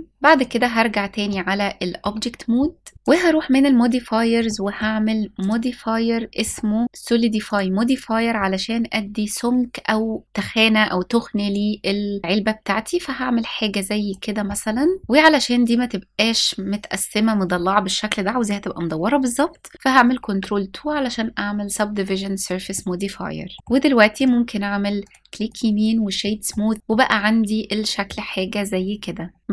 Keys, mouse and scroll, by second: 0.9-1.7 shift+middle drag, 2.9 click, 4.1 middle click, 5.0-7.3 drag, 11.1-13.8 drag, 14.3-14.8 scroll down 2, 14.8 scroll up 2, 19.8 ctrl+2, 21.8-22.4 scroll up 1, 22.4-23.2 middle drag, 23.8 right click, 24.6 right click, 25.9 middle drag, 26.4-26.8 scroll up 1, 26.8-27.7 middle drag, 28.1-28.4 scroll down 2, 28.8-29.1 scroll down 1.